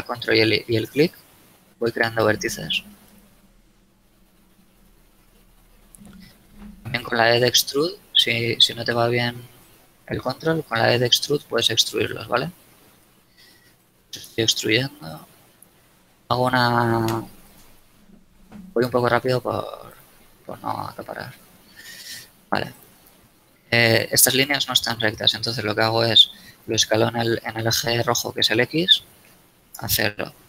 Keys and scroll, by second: 7.0 e, 10.7 e, 12.3 e, 14.0 e, 15.3 e, 16.3 e, 17.7 e, 19.0 e, 20.7 e, 23.3 a, 28.7 s, 29.0 x, 29.6 0, 29.8 Return.